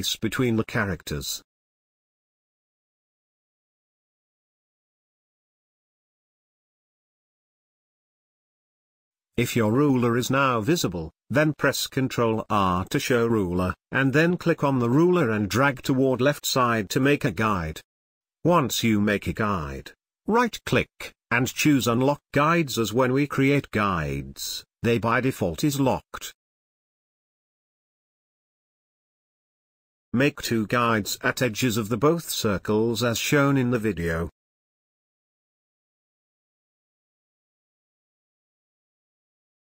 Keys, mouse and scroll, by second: 6.1-12.7 drag, 12.7 ctrl+r, 13.5 scroll up 1, 15.1-19.8 drag, 19.8 click, 20.7 right click, 23.2-31.4 drag, 31.4 space, 31.8-36.3 ctrl+drag, 36.3 space, 36.4 ctrl+click, 37.6-39.6 drag.